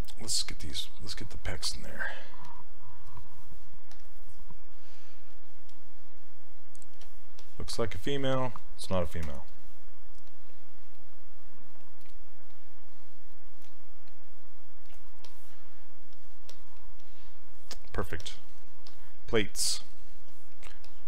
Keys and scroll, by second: 9.3 w.